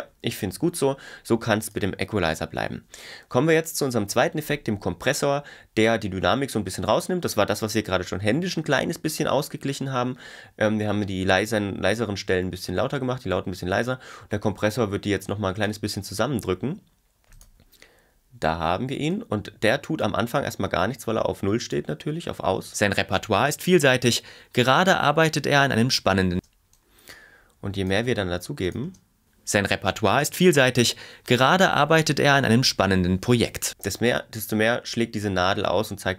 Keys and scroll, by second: 22.5 space, 26.4 space, 28.9 space, 33.7 space.